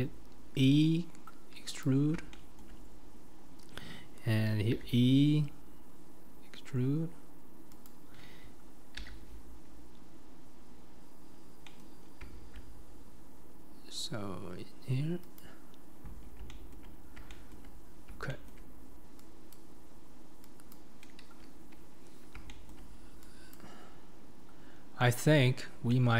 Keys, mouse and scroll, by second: 4.8 e, 9.1 e, 16.5 shift+middle click, 17.3-19.5 shift+middle drag, 19.5 click, 20.7 click, 22.5-23.5 shift+middle drag, 23.5 click, 24.0-24.7 scroll up 2, 24.7 scroll down 1, 25.0-26.1 middle drag.